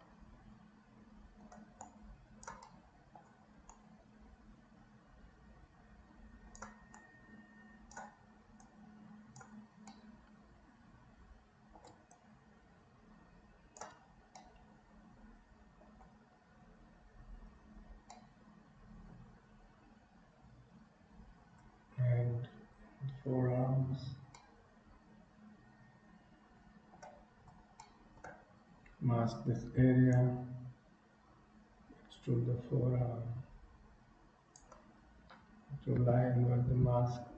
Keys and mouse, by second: 1.4 middle click, 1.8 click, 2.8 middle click, 3.8-6.7 drag, 7.0-8.1 drag, 8.6 click, 10.0-11.8 middle drag, 12.2-13.9 shift+drag, 14.5-16.0 middle drag, 18.2 middle click, 24.4-27.0 middle drag, 28.0 shift+middle click, 29.8 m, 30.3-34.6 drag, 36.2 ctrl+i, 36.9 KP_3.